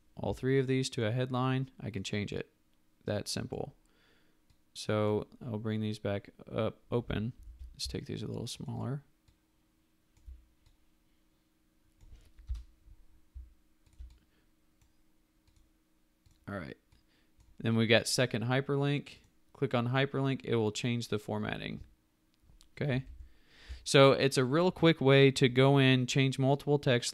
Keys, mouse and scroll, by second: 7.3 ctrl+t, 8.5 ctrl+t, 8.6 shift+click, 8.7 shift+double click, 9.6 shift+click, 12.4 Return, 13.9 ctrl+click, 23.0 ctrl+alt+z.